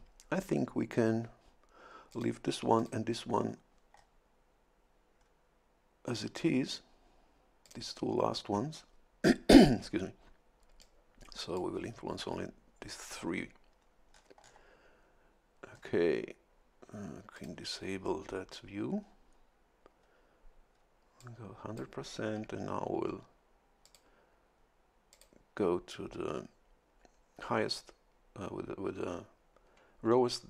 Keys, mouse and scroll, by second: 2.1 click, 2.8 click, 3.9 scroll up 1, 5.2 scroll up 1, 7.6 click, 10.8 click, 14.1-14.7 scroll down 1, 15.7-16.3 scroll up 1, 17.3 click, 19.0 scroll up 1, 20.0-20.3 scroll up 1, 20.7 scroll up 1, 21.2 click, 23.8 click, 25.1 click.